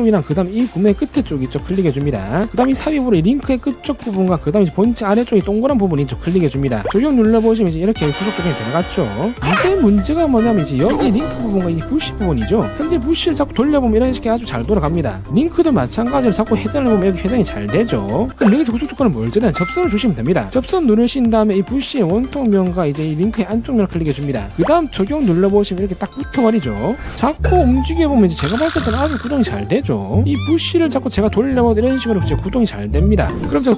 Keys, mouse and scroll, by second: 0.1 click, 1.9 click, 4.3 click, 4.7 middle click, 6.7 click, 7.1 click, 7.6 click, 7.9 scroll down 1, 8.2 scroll up 1, 8.7 click, 9.8 click, 10.5 middle click, 11.0 click, 11.7 drag, 12.4 click, 13.4-15.3 drag, 16.1 click, 16.4 middle click, 17.1-18.4 drag, 21.4 click, 22.7 click, 24.3 click, 25.3 click, 25.9 click, 27.3-30.3 drag, 30.4-33.3 drag.